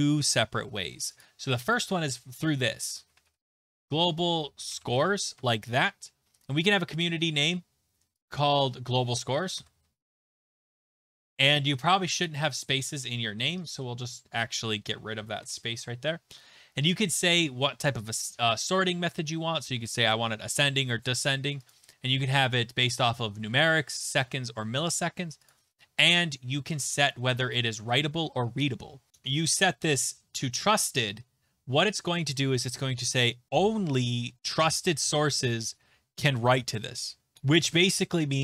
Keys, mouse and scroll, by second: 1.2 click, 2.6-5.4 typing, 5.4 Tab, 6.4-7.0 scroll, 7.0 click, 8.2 click, 9.3-11.6 typing, 9.6 middle click, 12.2 click, 14.8 Left, 15.0 Left, 15.4 BackSpace, 17.0 click, 21.7 click, 25.5 click, 29.1 click, 29.6 click.